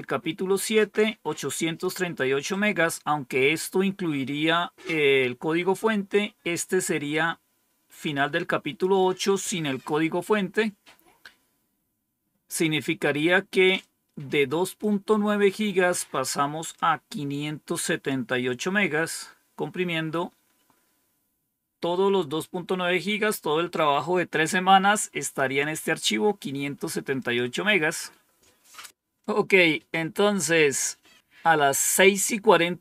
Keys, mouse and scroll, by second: 0.6-1.8 drag, 7.0-8.8 drag, 13.7-14.8 drag, 16.6-18.0 drag, 25.1 click, 25.5 click, 27.1 click.